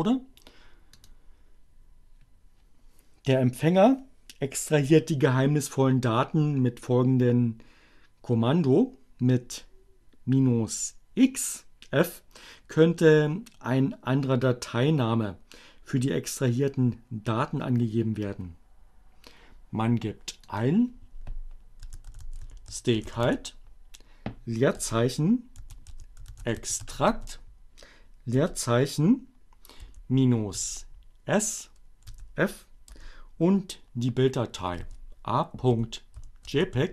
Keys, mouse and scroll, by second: 1.0 click, 20.0 click, 21.6-23.3 typing, 24.6-27.4 typing, 29.5-30.5 typing, 32.2 f, 32.4 space, 34.8-36.9 typing.